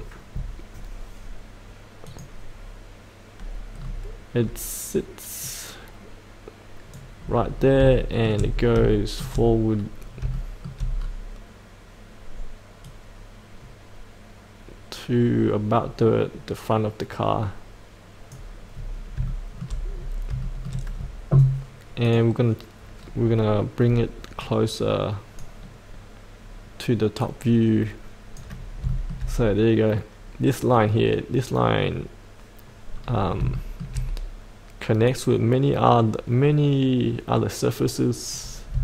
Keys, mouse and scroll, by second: 2.0 click, 3.8-4.3 scroll up 1, 4.3 scroll down 1, 5.4-7.1 drag, 7.1-7.8 scroll up 2, 7.9 shift+middle click, 8.5 scroll up 1, 8.9 shift+middle click, 9.7-10.2 scroll down 1, 10.3 shift+middle click, 12.8-17.7 drag, 17.8 click, 18.7 scroll up 1, 19.2 shift+middle click, 19.9-20.2 scroll up 1, 20.4 shift+middle click, 22.0 click, 23.0-23.8 scroll down 1, 24.4-25.8 drag, 26.9 click, 28.5 scroll up 1, 28.8-29.9 shift+middle drag, 32.9 scroll down 1, 33.5 shift+middle click, 35.0-38.6 drag, 38.6 scroll up 1.